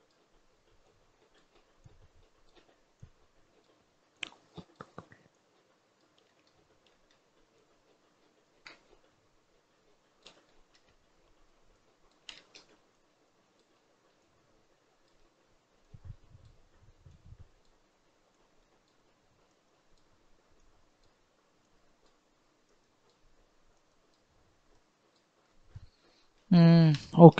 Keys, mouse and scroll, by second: 6.1-7.4 shift+middle drag, 7.4-10.4 drag, 10.4-11.6 shift+middle drag, 11.6 click, 12.2 shift+middle click, 12.8-25.3 drag, 25.3-25.9 scroll down 5, 25.9-27.3 middle drag.